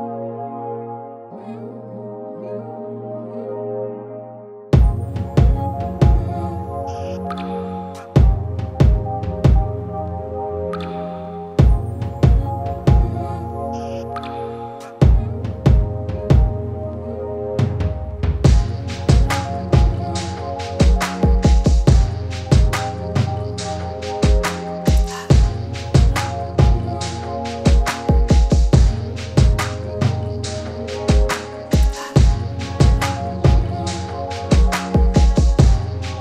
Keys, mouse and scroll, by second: 1.2 click, 2.1 ctrl+t, 4.0-6.1 drag, 9.0-11.1 typing, 12.5 click, 14.3 ctrl+t, 15.9 click, 16.8 right click, 19.2 click, 21.5 click, 23.8 ctrl+t, 24.9 click, 25.0-35.8 drag, 35.8 right click.